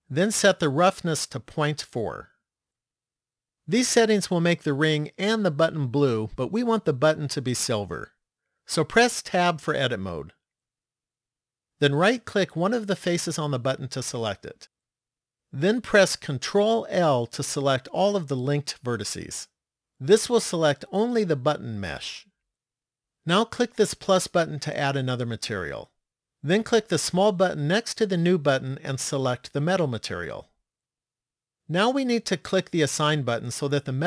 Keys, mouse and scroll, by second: 1.0 click, 10.1 Tab, 13.0 right click, 16.8 ctrl+l, 24.7 click, 27.4 click, 32.8 click.